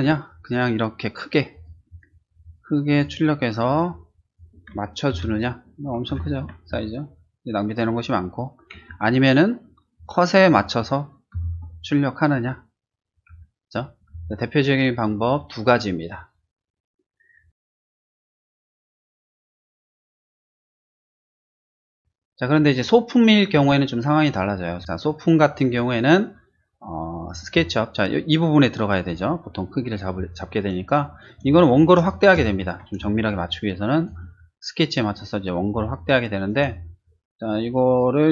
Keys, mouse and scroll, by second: 1.5 click, 1.9 click, 2.4 click, 2.9 click, 3.7 click, 4.3 click, 5.1 ctrl+t, 6.0 ctrl+-, 8.7 Escape, 9.9 click, 10.4 click, 11.3 ctrl+t, 13.3 Escape, 14.1 space, 14.2 click, 18.0 click, 19.5 click, 20.4 click, 21.9 click, 22.0 click, 22.5 click, 23.0 click, 23.9 click, 24.7 scroll down 1, 24.9 middle click, 25.2 middle click, 25.5 middle click, 26.2 scroll down 1, 26.5 shift+middle click, 26.9 shift+middle click, 28.6 click, 30.5 space, 30.7 click, 31.0 click, 33.0 ctrl+space, 33.3 click, 35.7 space, 35.8 click.